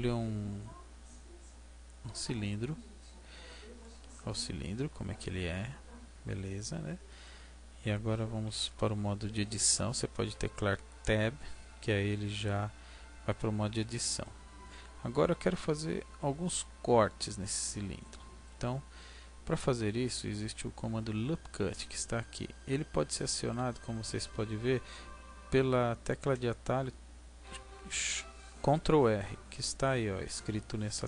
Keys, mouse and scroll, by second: 3.2-3.8 scroll up 2, 3.8 middle click, 3.8-4.8 scroll up 1, 10.1 Tab, 13.7-14.2 scroll up 3, 14.2 middle click.